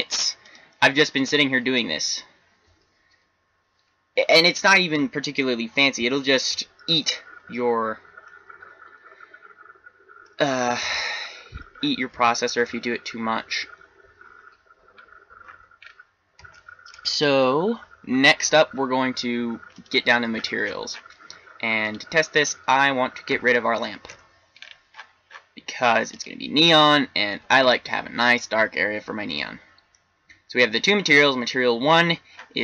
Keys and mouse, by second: 8.5-11.3 middle drag, 20.3 click, 21.8 right click, 23.2 x, 26.2 right click, 26.6 click, 29.3-32.1 middle drag, 32.3-32.6 middle drag.